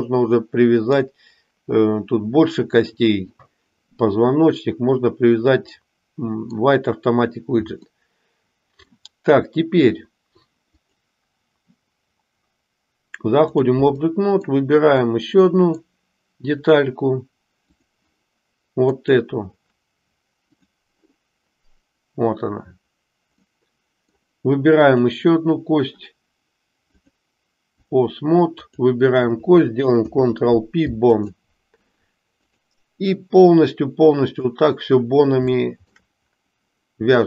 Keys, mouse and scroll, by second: 5.7-6.7 middle drag, 7.8-9.0 middle drag, 10.7-13.7 drag, 14.0 middle click, 15.1 middle click, 17.6 click, 18.8 click, 23.4 middle click, 24.8 click, 26.8-27.8 drag, 28.6 click, 29.8 ctrl+p, 32.4-34.5 drag, 35.5 shift+middle click.